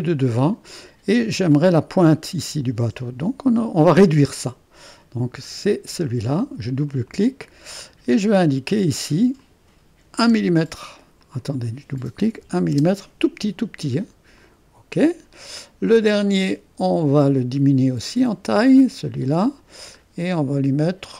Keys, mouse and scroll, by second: 5.5-7.9 drag, 7.9-9.4 scroll up 1, 9.4 click, 10.4 click, 10.4 1, 11.4-12.5 drag, 12.5 1, 12.8 Return, 14.4-17.9 drag, 18.6-20.0 drag, 20.0-21.1 scroll up 1.